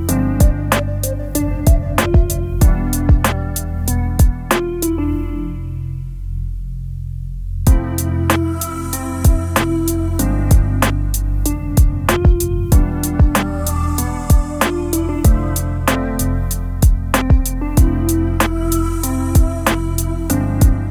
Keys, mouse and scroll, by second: 1.4 End, 4.9 double click, 5.0 double click, 15.8 alt+click, 18.2 alt+click, 19.8-20.9 typing.